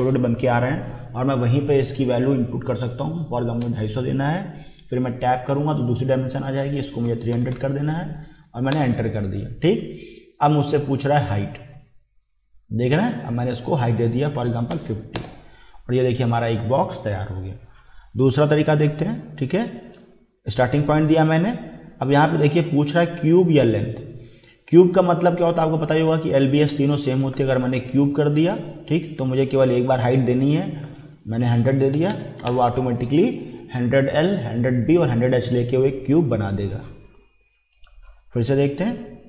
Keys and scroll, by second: 2.7 2, 3.0 5, 3.6 0, 5.2 Tab, 7.1 3, 7.3 0, 8.7 Return, 14.4 5, 14.8 0, 15.2 Return, 31.5-32.5 typing, 32.5 Return.